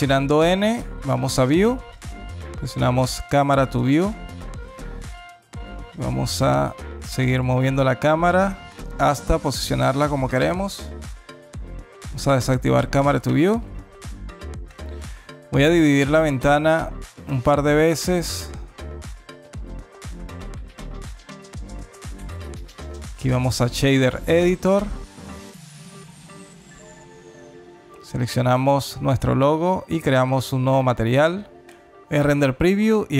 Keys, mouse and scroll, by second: 1.1 click, 2.6 click, 3.7 n, 4.9 alt+click, 6.3 alt+middle click, 7.3 alt+click, 9.0 alt+middle click, 10.9 n, 12.0 click, 12.5 n, 15.8 click, 17.6-18.0 scroll up 2, 21.2 click, 22.5 click, 25.0 n, 26.7 click, 28.0 click, 29.0 scroll up 2, 29.4 middle click, 30.0 middle click, 30.1 scroll up 3, 30.7 middle click, 32.6 click.